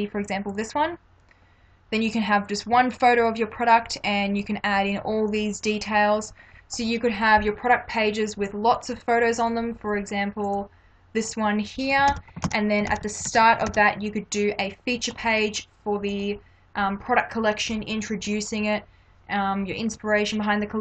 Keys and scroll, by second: 9.6 space, 12.1 ctrl+-.